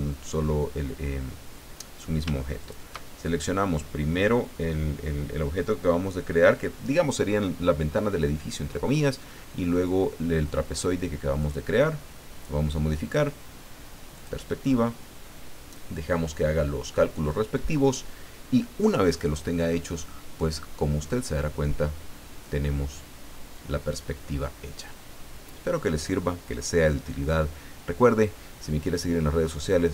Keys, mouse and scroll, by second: 2.6 shift+click, 11.4 click, 14.1 click.